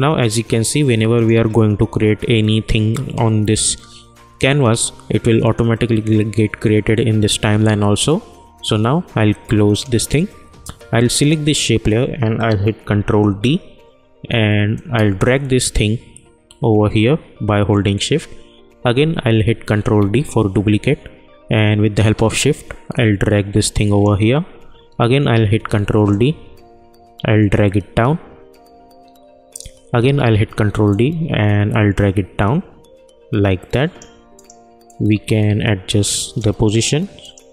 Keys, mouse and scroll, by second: 5.4 click, 9.7 click, 12.9 ctrl+d, 14.7-19.7 drag, 19.7 ctrl+d, 21.9-25.3 drag, 25.3 ctrl+d, 26.2-30.4 drag, 30.1 d, 30.9-37.5 drag.